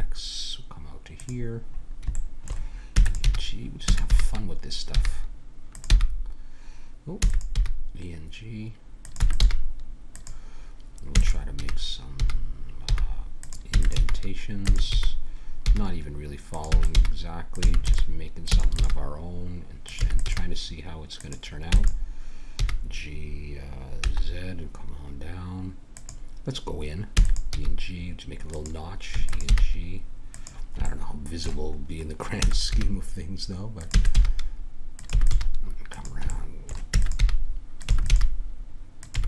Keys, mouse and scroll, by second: 2.9 e, 3.2 g, 3.9 e, 5.9 g, 7.6 g, 9.2 e, 9.4 g, 11.1 e, 11.6 g, 13.7 e, 14.0 g, 14.7 e, 16.7-18.8 typing, 20.0 e, 20.3 g, 21.7 e, 22.6 g, 27.1 e, 27.5 g, 29.1 e, 29.5 g, 32.4 e, 32.7 g, 33.9 e, 34.1 g, 35.1 e, 35.3 g, 36.3 middle click, 36.9 e, 37.2 g, 37.9 e, 38.1 g, 39.2 e.